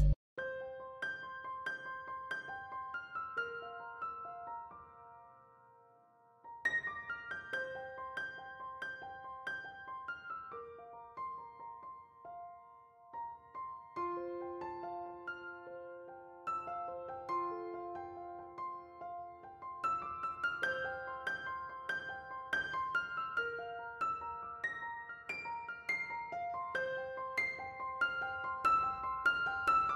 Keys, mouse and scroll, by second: 0.5 q, 14.5-16.7 typing, 25.0 f, 26.2 q.